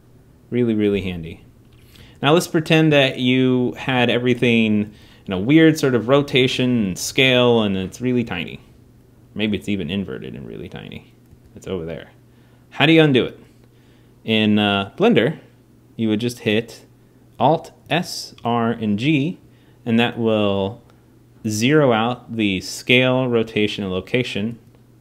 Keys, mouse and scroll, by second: 1.8 g, 5.3 click, 5.6 r, 6.6 g, 7.4 s, 9.2 s, 11.0 g, 17.6 alt+s, 18.1 alt+r, 18.5 alt+g.